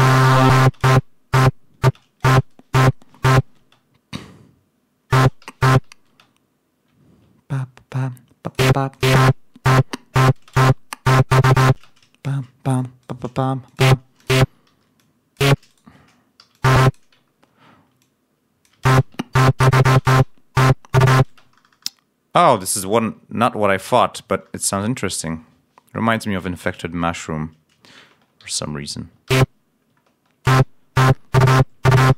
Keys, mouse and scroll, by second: 0.5 space, 2.2 space, 3.5 space, 5.1 space, 6.0 ctrl+space, 6.9 ctrl+scroll up 1, 8.3 click, 8.8 click, 9.1 space, 10.3 space, 12.1 shift+right click, 12.6 shift+right click, 12.9 shift+right click, 13.6 shift+click, 14.1 click, 14.6 ctrl+w, 14.9 ctrl+click, 15.6 shift+right click, 16.3 shift+e, 16.5 click, 17.2 ctrl+scroll up 2, 18.8 alt+space, 19.1 ctrl+alt+scroll down 3, 19.9 space, 21.2 space, 23.5 ctrl+scroll up 2, 24.1 ctrl+scroll down 2, 26.1 ctrl+d, 26.6 ctrl+scroll up 1, 28.3 ctrl+c, 29.2 ctrl+v, 29.9 ctrl+scroll down 2, 30.4 ctrl+space.